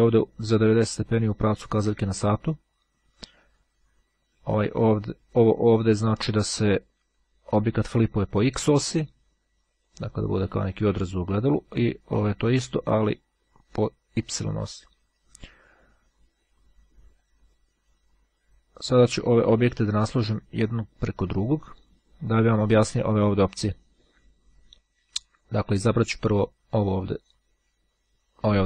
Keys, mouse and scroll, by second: 0.0-2.0 drag, 4.6 click, 7.5-8.5 drag, 9.5-11.2 drag, 12.8 click, 17.3-18.8 drag, 19.5-20.8 drag, 26.5-27.7 drag.